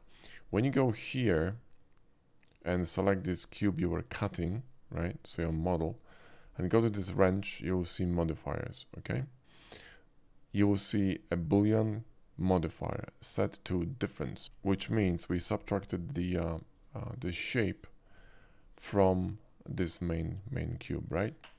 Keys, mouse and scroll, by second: 1.0 click, 7.1 click, 9.5-10.6 drag, 14.6 shift+middle drag, 15.3 shift+middle drag, 16.7 shift+click, 18.1 middle click, 18.8 click, 19.3 middle drag, 20.9-21.5 middle drag.